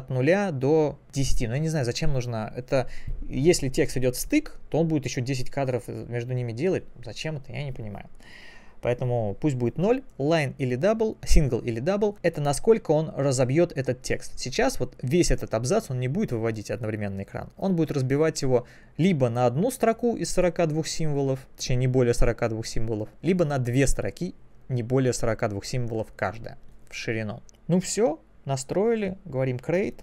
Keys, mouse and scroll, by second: 23.5 click, 29.9 click.